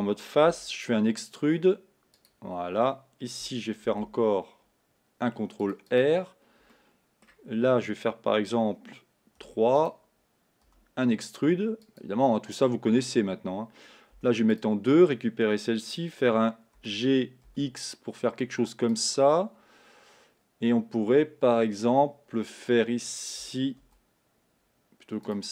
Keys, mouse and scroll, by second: 0.5 e, 4.3 ctrl+r, 6.7-9.4 middle drag, 9.4 3, 9.8 click, 10.7 e, 14.2 2, 14.5 click, 16.8 g, 23.8 ctrl+r.